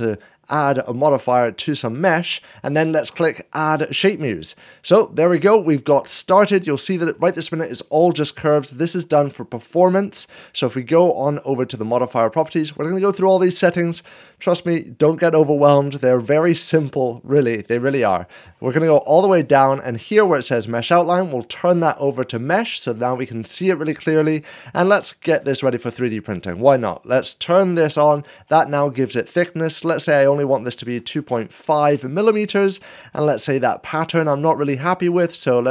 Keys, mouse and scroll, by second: 3.9-4.9 drag, 5.1-5.5 scroll down 1, 5.9-6.9 middle drag, 9.7-10.7 drag, 18.1 scroll down 1, 20.9-21.9 drag, 27.1 click, 27.9 click, 28.3 middle click, 28.5 middle click, 29.9 click, 30.7-31.3 typing, 30.9 scroll down 1, 31.6 Return, 31.9 Return, 32.9-34.0 middle drag.